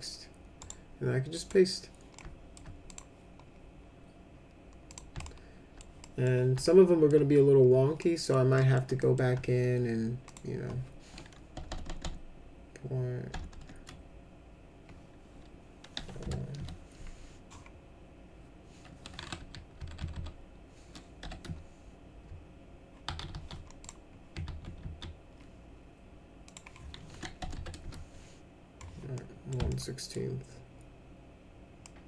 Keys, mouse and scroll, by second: 0.6 right click, 1.3 click, 2.1 alt+middle click, 2.9 click, 4.8 click, 5.2 alt+middle click, 6.0 middle click, 6.6 alt+middle click, 8.0 middle click, 8.5 middle click, 9.0 alt+middle click, 10.2 click, 11.5 BackSpace, 11.6 BackSpace, 11.8 BackSpace, 12.0 BackSpace, 13.3 BackSpace, 13.6 BackSpace, 15.9 0, 16.2 1, 16.5 Return, 19.4 Left, 19.7 Right, 19.9 Right, 20.1 Right, 21.2 0, 21.4 Return, 23.0 ctrl+z, 23.3 ctrl+z, 23.8 click, 24.4 ctrl+z, 24.8 ctrl+z, 26.4 click, 27.3 BackSpace, 27.5 1, 27.8 Return, 29.1 middle click, 29.6 alt+middle click, 31.8 middle click.